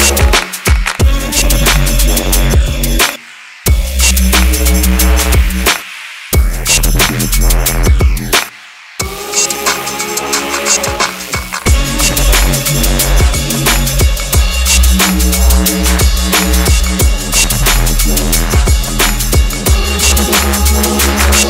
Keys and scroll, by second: 9.8 Delete.